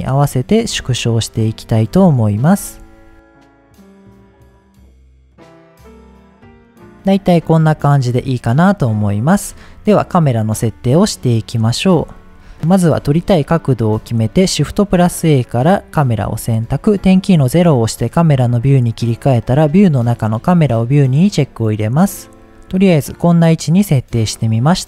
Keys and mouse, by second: 0.8 s, 1.3 click, 2.0 KP_1, 2.6 g, 3.6 drag, 4.2-5.7 typing, 4.6 shift+middle click, 5.0 click, 5.3 click, 5.6 click, 5.9 click, 6.2 middle click, 6.6 middle click, 7.8 shift+middle drag, 9.6 middle click, 11.0-11.4 middle drag, 12.1-12.4 shift+middle drag, 13.0 shift+middle click, 13.6 middle click, 14.0-14.4 shift+middle drag, 14.6 shift+a, 17.0 KP_0, 18.6 click, 20.2 click, 22.4 middle drag.